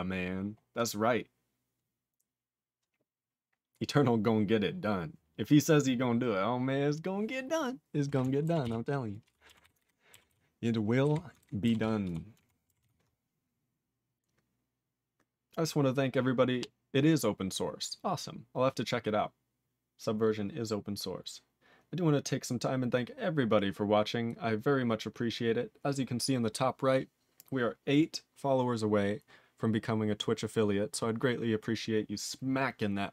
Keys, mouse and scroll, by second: 0.7 click, 0.8 click, 8.6 ctrl+s, 9.2 ctrl+p, 9.6 ctrl+s, 9.8 ctrl+alt+b, 10.3 ctrl+s, 11.0 ctrl+b, 12.0 ctrl+s, 12.4 ctrl+alt+f, 12.8 ctrl+s.